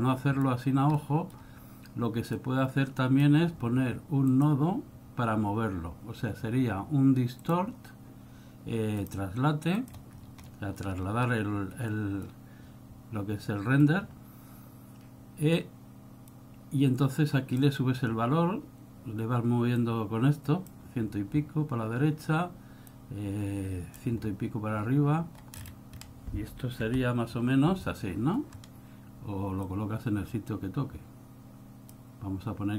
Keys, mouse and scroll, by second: 1.0 middle click, 2.5 click, 4.4 click, 10.4 scroll up 4, 10.6 middle click, 11.2 scroll up 2, 12.1 middle click, 14.2-14.5 scroll up 1, 16.5 click, 19.9 click, 25.8-27.0 scroll down 6, 27.0 v, 28.8 scroll up 3, 29.8 click.